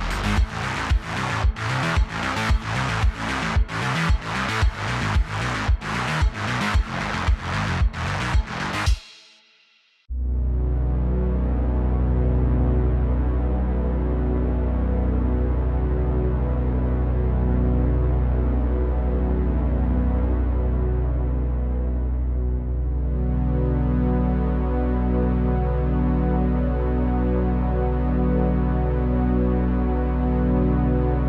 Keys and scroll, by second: 1.5 Tab, 2.0 a, 3.6 Tab, 5.7 Tab, 6.4 typing, 11.8 q, 12.9 q, 14.3 q, 16.4 q, 17.0 q, 17.6 q, 19.3 Tab, 21.4-22.7 typing, 21.9 Tab, 27.7 super+z, 29.7 typing.